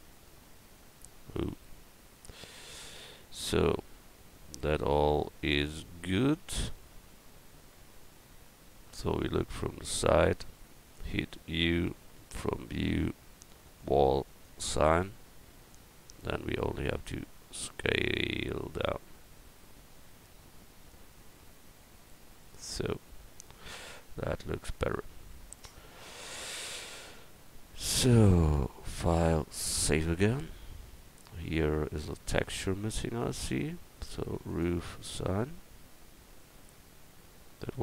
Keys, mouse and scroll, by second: 0.7-3.5 right drag, 3.5-5.3 middle drag, 9.8 click, 11.5 u, 13.6-15.9 drag, 17.0 s, 22.8 Tab, 28.9-30.5 drag, 32.0 Tab, 32.8-37.8 drag, 34.5 right click.